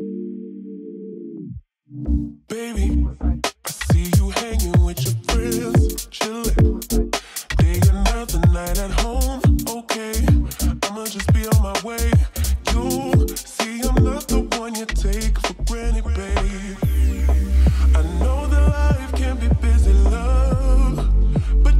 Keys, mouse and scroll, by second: 4.6 t, 5.4 click, 6.1-6.8 typing, 9.7-13.3 drag, 15.2 ctrl+s, 16.6 click, 17.7 0.